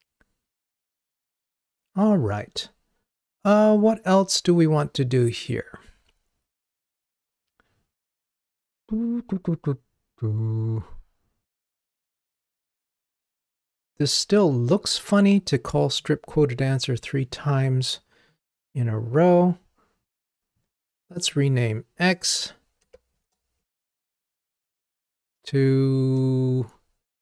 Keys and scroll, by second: 24.4 ctrl+t.